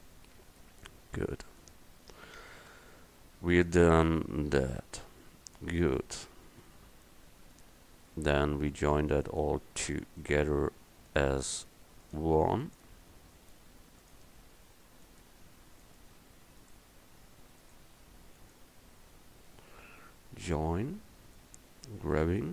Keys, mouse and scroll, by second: 0.4 Tab, 22.1 g.